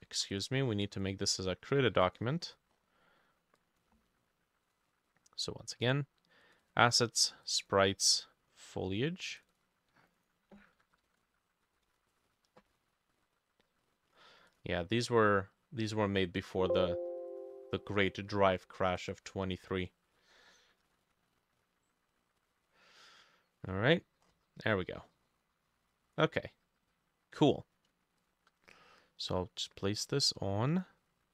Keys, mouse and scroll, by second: 2.5-4.8 drag, 2.5-4.5 scroll up 12, 6.7-14.1 drag, 10.5-12.5 typing, 11.2 shift+middle click, 20.9 ctrl+s, 24.3-24.9 scroll up 6, 24.9 middle click, 28.2 shift+click, 30.0-31.3 scroll up 1.